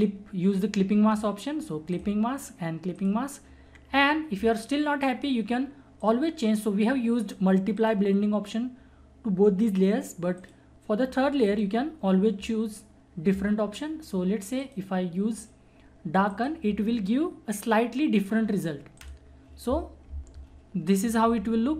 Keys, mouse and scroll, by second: 6.0 click, 10.4 click, 14.6 click, 19.0 click, 20.3 ctrl+-, 21.2 ctrl+=.